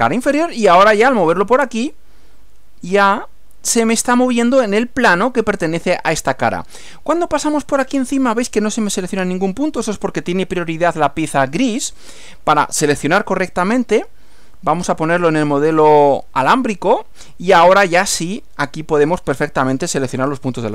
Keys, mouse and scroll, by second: 14.8 click, 15.9 click.